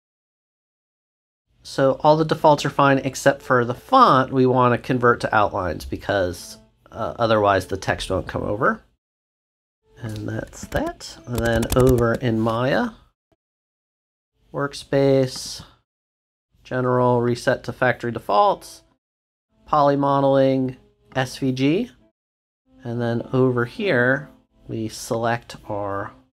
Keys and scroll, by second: 9.5 shift+BackSpace.